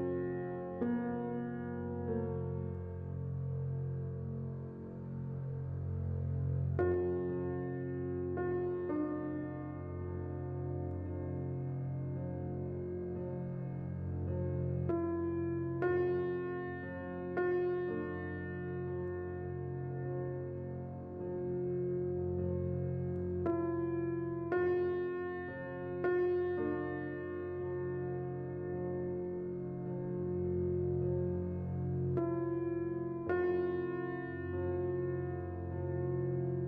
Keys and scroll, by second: 1.0 z, 2.9-3.6 typing, 20.2 z, 24.8 s, 25.9-29.1 typing, 31.3 a, 35.7 x.